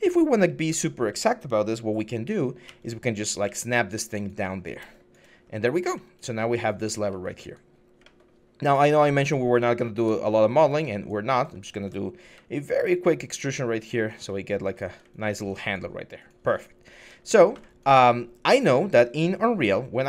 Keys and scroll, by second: 0.5 w, 2.4-3.2 typing, 5.2 6, 11.4 alt+q, 12.0 ctrl+e, 17.4 alt+e.